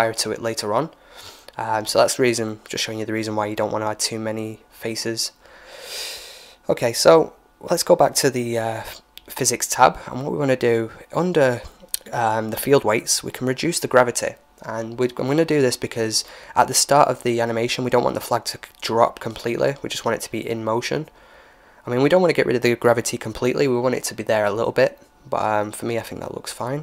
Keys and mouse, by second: 1.6-8.7 drag, 7.4-12.3 middle drag, 9.7-11.6 drag, 12.3-14.1 drag, 15.2-16.5 drag, 16.0 alt+a.